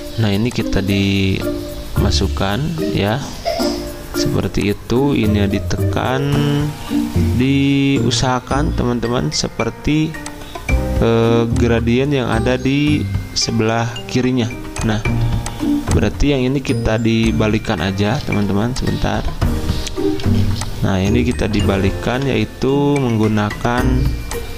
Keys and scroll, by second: 18.2 Escape, 18.5 Escape.